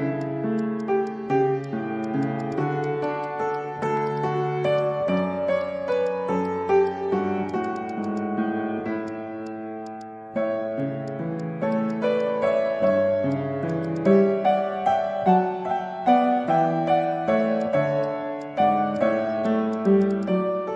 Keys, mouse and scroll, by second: 0.2 alt+click, 0.6 alt+click, 1.6 Tab, 2.0 alt+click, 3.0 alt+click, 4.0 alt+click, 4.5 ctrl+z, 5.1 alt+click, 5.9 alt+click, 6.2 alt+middle click, 6.8 Tab, 7.3 scroll down 1, 7.5 alt+click, 7.6 alt+click, 8.0 alt+click, 8.6 Tab, 9.8 alt+click, 10.6 Tab, 11.4 alt+click, 11.7 alt+click, 12.6 scroll up 1, 12.9 alt+click, 13.0 alt+middle click, 13.6 scroll down 1, 13.7 alt+click, 15.8 Tab, 15.8 middle click, 15.9 Tab, 16.6 middle click, 17.1 Tab, 18.0 Tab, 18.3 Tab, 18.9 Tab, 19.4 alt+click, 19.7 alt+click, 20.0 alt+click.